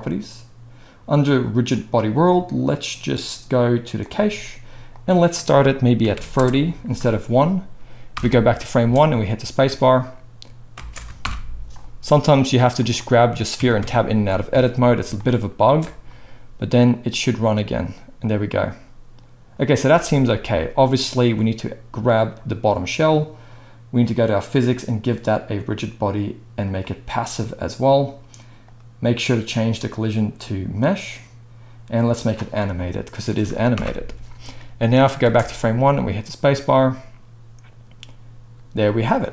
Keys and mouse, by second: 0.0-1.7 middle drag, 1.7-12.9 drag, 8.1 shift+Left, 8.8 space, 10.7 space, 11.2 shift+Left, 12.9-13.8 middle drag, 13.6 Tab, 13.8 Tab, 14.5 alt+a, 15.6 space, 19.9 space, 22.2-22.9 drag, 24.3 click, 25.2-32.2 drag, 32.2-33.7 middle drag, 33.7 shift+Left, 35.2 space.